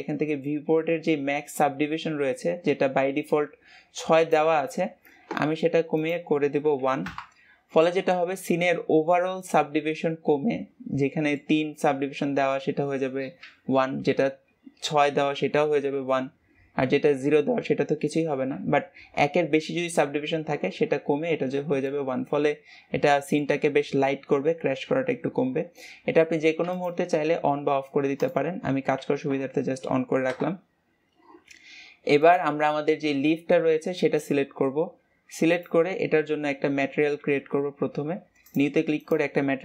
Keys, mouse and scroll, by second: 5.9-8.6 drag, 8.6-11.6 middle drag, 21.8-26.7 middle drag, 26.7 click, 29.0 ctrl+s, 30.3 KP_0, 32.2-35.2 drag, 35.5-39.6 drag.